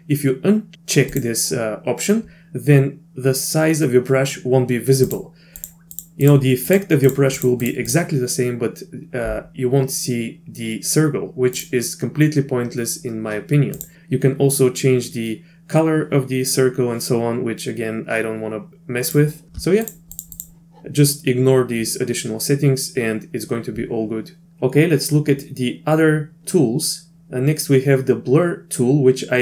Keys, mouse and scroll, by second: 1.1 click, 5.1 click, 5.6 click, 5.9 click, 6.2 click, 6.7 click, 7.1 click, 7.4 click, 7.6 click, 7.9 click, 11.5 click, 13.8 click, 19.8 click, 20.1 click, 20.3 click.